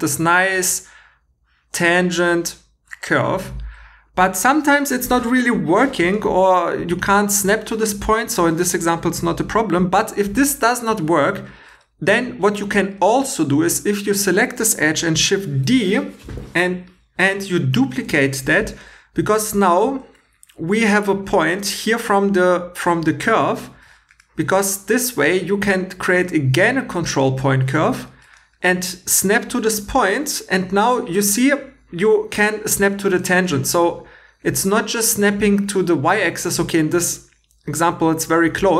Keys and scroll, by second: 9.7 x, 15.6 shift+d, 19.1 1.